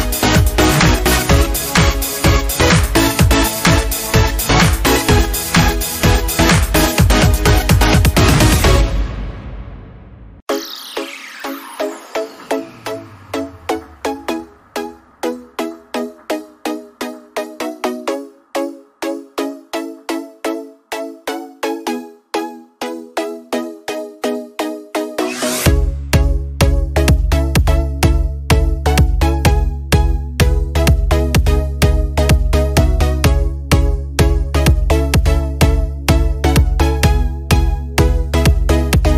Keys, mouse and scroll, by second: 0.6 scroll down 1, 2.1 shift+click, 25.6 scroll up 1, 26.4 click, 27.2 scroll up 1, 28.3 scroll down 1, 29.8 scroll up 1, 33.1 click, 35.7 click.